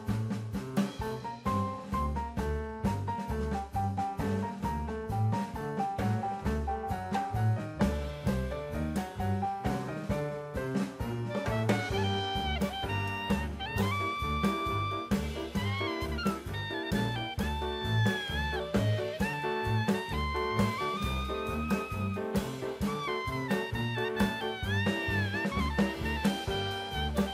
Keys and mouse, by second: 0.8 p, 3.2 click, 3.5 Tab, 4.4 click, 5.5-6.7 drag, 7.6-9.1 drag, 9.8 click, 10.7 Tab, 12.7 2, 13.1 click, 13.5 alt+click, 14.8 s, 15.2 z, 16.1 KP_0, 16.2 KP_Enter, 18.2 3, 19.1 alt+z, 19.5-20.3 drag, 22.3 middle click, 23.5 alt+z, 24.2 middle click, 25.7 alt+e.